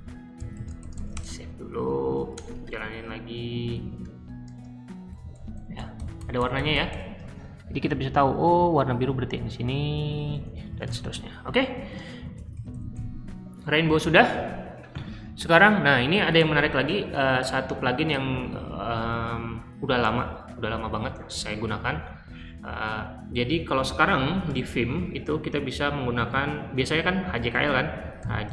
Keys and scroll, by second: 0.0-2.7 typing, 4.1-6.8 typing, 7.6 Escape, 8.0-12.8 typing, 18.3 super+c, 27.9-28.5 typing.